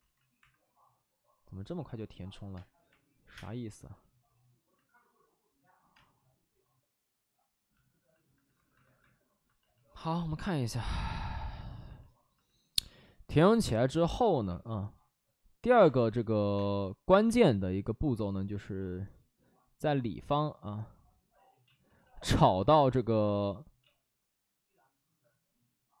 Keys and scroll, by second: 0.3 1, 2.5 space, 2.8 3, 3.2 3, 3.3 space, 5.9 space, 8.4 space, 8.5 alt+s, 8.7 alt+s, 13.6 space, 14.4 5, 15.6 ctrl+z, 15.8 space, 16.5 space, 17.2 space, 18.5 ctrl+z, 21.6 ctrl+z, 21.7 ctrl+z, 21.9 ctrl+z.